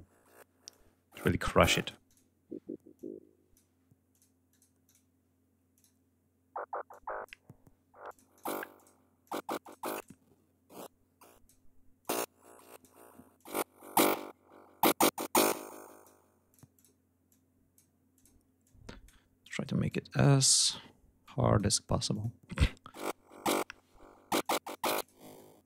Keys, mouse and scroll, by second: 0.1 click, 1.2 click, 2.4 click, 3.5 click, 3.9 click, 4.3 click, 5.2 click, 6.3 click, 7.5 click, 8.2 click, 8.7 click, 9.1 click, 9.4 click, 10.2 click, 11.5 click, 12.8 click, 14.8 click, 15.9 click, 16.7 click, 17.6 click, 18.1 click, 18.9 click, 19.3 click, 20.1 click, 20.7 click, 21.6 click, 23.9 click, 24.4 click, 24.8-25.3 drag, 25.4 click.